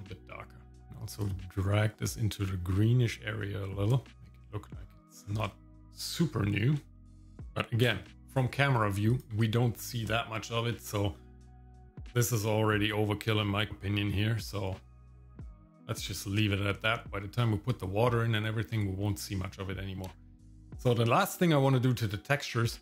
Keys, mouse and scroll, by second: 0.7 shift+middle click, 0.7 click, 4.1 scroll down 4, 4.2 middle click, 4.8 scroll up 2, 5.3 scroll down 1, 5.5 shift+middle click, 6.3 scroll down 1, 6.9 shift+middle click, 7.9 KP_0, 9.1 ctrl+click, 11.1 middle click, 13.7 click, 13.7 scroll down 1.